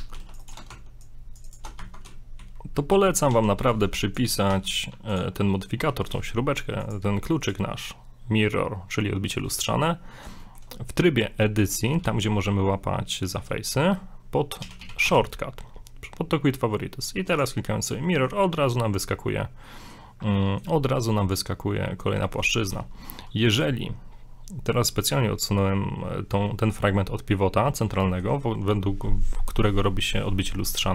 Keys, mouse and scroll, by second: 0.1 ctrl+r, 0.7 ctrl+Tab, 2.2 scroll down 2, 2.4 z, 3.2 right click, 3.3 a, 3.6 b, 4.5 x, 5.4 middle click, 5.8 scroll up 2, 5.8 z, 6.8 click, 7.4 click, 9.7 middle click, 9.8 scroll down 1, 10.4 shift+middle click, 11.4 scroll up 2, 11.6 right click, 12.0 g, 14.6 a, 14.8 a, 15.1 q, 18.1 middle click, 19.4-19.7 scroll down 2, 19.7 middle click, 20.4 middle click, 22.0 middle click, 22.4 middle click, 22.6 middle click, 22.6 g, 27.7-28.1 scroll up 2, 28.0 middle click, 28.1 shift+middle click.